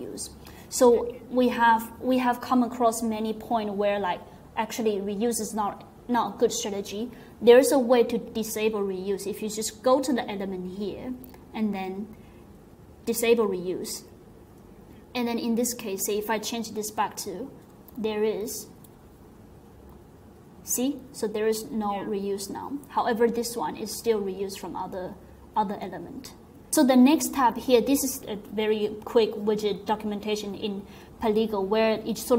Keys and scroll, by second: 16.9-18.5 typing, 18.6 super+s, 20.0 typing.